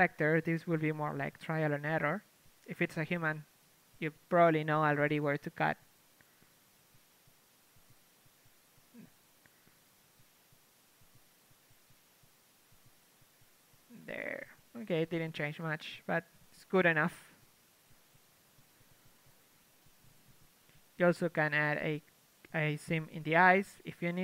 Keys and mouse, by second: 0.4 Tab, 1.3 a, 7.2 ctrl+Tab, 9.0 ctrl+e, 10.9 ctrl+e, 12.2 ctrl+e, 12.4 a, 13.3 ctrl+Tab, 13.8 l, 14.7 u, 16.0 a, 16.3 Tab, 18.0 KP_3, 18.8 Tab, 19.5 Tab, 20.4 z, 21.0 Tab, 21.2 a, 21.3 a, 21.5 a, 22.7 z, 23.1 ctrl+KP_Add, 23.3 ctrl+KP_Add, 23.4 ctrl+KP_Add, 23.8 ctrl+KP_Add.